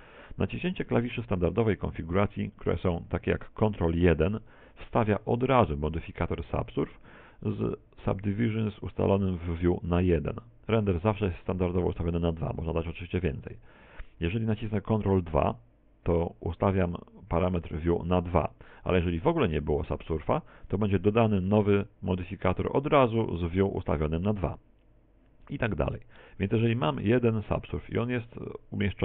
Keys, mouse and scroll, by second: 0.4 middle click, 4.3 ctrl+1, 15.6 ctrl+2, 19.7 click, 21.2 ctrl+2, 25.7 ctrl+3, 26.2 ctrl+4, 26.8 ctrl+5.